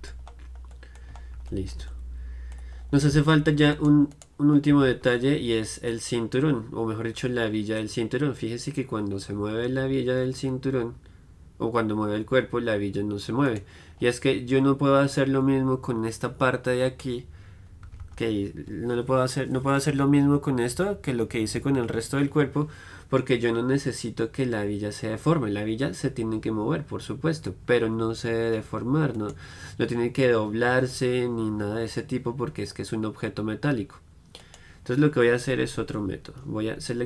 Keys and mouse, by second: 0.6-3.8 middle drag, 3.8-6.2 right drag, 6.2-13.8 middle drag, 13.8-16.5 right drag, 16.5-29.4 middle drag, 29.5-37.0 right drag, 35.7 KP_1.